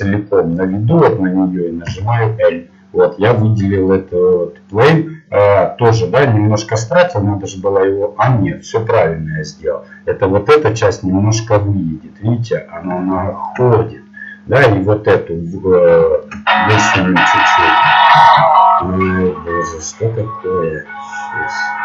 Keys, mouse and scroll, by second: 1.8 l, 3.5 middle click.